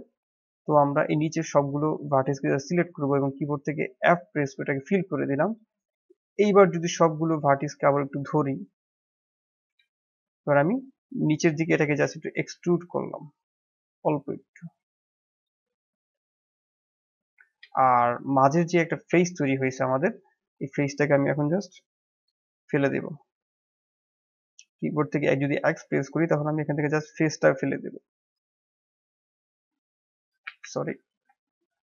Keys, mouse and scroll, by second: 0.1-1.5 middle drag, 1.5 click, 1.7-3.9 drag, 3.9 f, 6.7 alt+click, 8.0-9.8 drag, 9.8-11.0 middle drag, 11.0 e, 16.4-18.2 middle drag, 18.2 click, 18.9 shift+z, 20.5 click, 21.0 click, 22.8 x, 25.7 x, 28.0-30.4 middle drag, 30.4 ctrl+z, 30.8 ctrl+z, 31.7 ctrl+z.